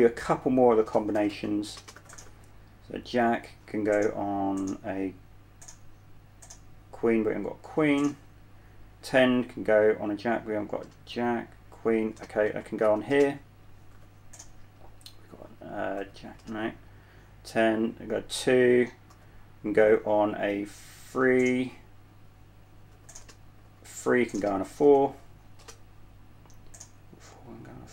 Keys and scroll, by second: 1.1-2.6 typing, 8.1 typing, 11.1 typing, 12.1-14.2 typing, 15.7-16.7 typing, 19.6 typing, 23.2-27.0 typing.